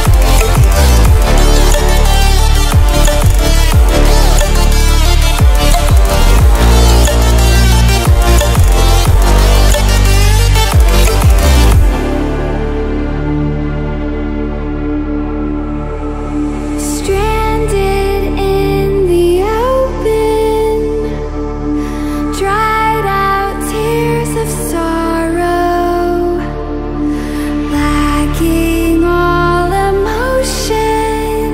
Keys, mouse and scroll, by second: 1.9 ctrl+alt+scroll down 1, 2.4 ctrl+alt+scroll down 1, 3.0 right click, 4.5 click, 6.5-7.3 ctrl+alt+scroll down 2, 7.8 click, 8.7 ctrl+alt+scroll down 1, 9.2-9.7 ctrl+alt+scroll up 2, 12.3-13.2 ctrl+alt+scroll down 4, 13.2 ctrl+alt+scroll up 2, 14.7-15.3 click, 24.2 click, 27.0-31.5 drag.